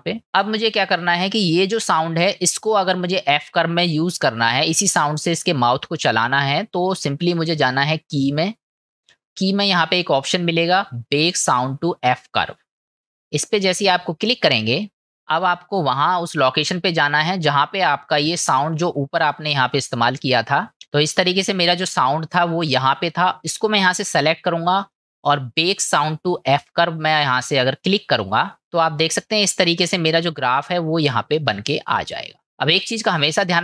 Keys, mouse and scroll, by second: 8.3-15.0 drag, 29.8-31.4 middle drag, 33.4 middle click.